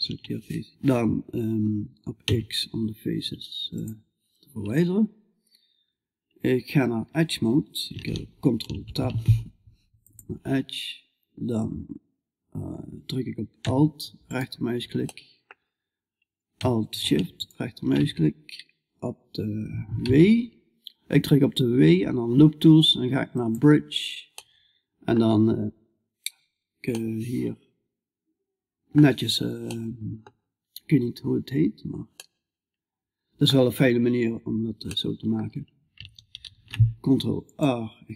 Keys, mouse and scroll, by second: 1.7 x, 13.7 right click, 14.5-32.1 middle drag, 35.8 ctrl+r, 35.8-36.9 middle drag.